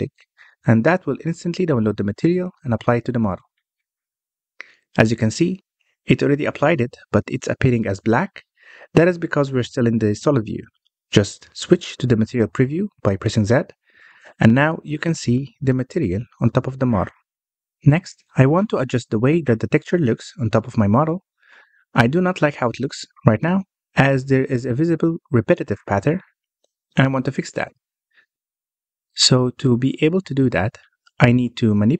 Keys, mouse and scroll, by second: 0.9-1.2 scroll up 1, 1.2-4.2 middle drag, 4.4-4.8 scroll down 1, 4.8-10.0 middle drag, 10.0 z, 13.4-14.3 scroll up 1, 14.3-17.3 middle drag, 17.9-31.9 middle drag.